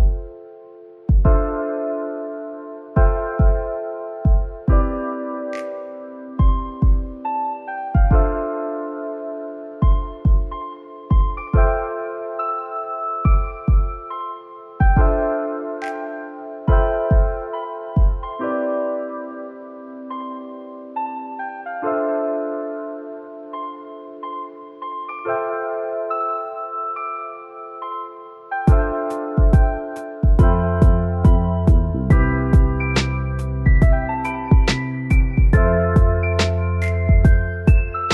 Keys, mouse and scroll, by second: 1.5 middle click, 11.9 middle click, 12.1 shift+click, 14.8 middle click, 17.9 Tab, 18.8 3, 19.4 shift+middle click, 20.8 shift+middle click, 25.5 Tab, 26.1 middle click, 26.8 scroll up 1.